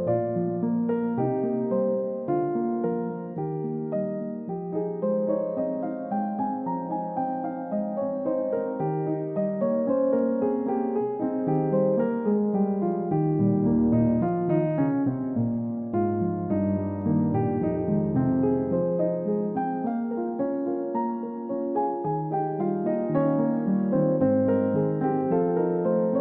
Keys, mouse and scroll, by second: 8.5 middle click, 9.3-9.8 scroll up 1, 10.6 scroll down 1, 11.1 middle click, 13.5 scroll up 1, 13.9 scroll down 1, 14.1 scroll up 1, 14.4 scroll down 1, 14.9 scroll up 1, 20.1 space, 23.5 typing, 24.2 scroll down 1, 25.3 double click, 25.5 scroll down 1, 25.7 middle click.